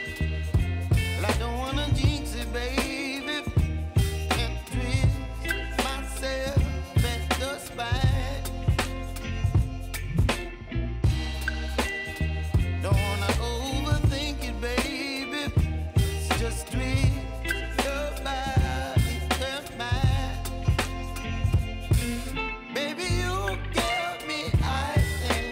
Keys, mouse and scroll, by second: 3.1 ctrl+z, 3.6-8.6 drag, 8.6 space, 10.5 click, 11.0 space, 14.0 j, 15.1-17.0 drag, 18.3 k, 19.8 click, 20.5 Return, 21.8 click, 22.2 Return, 23.1 j, 23.5 space.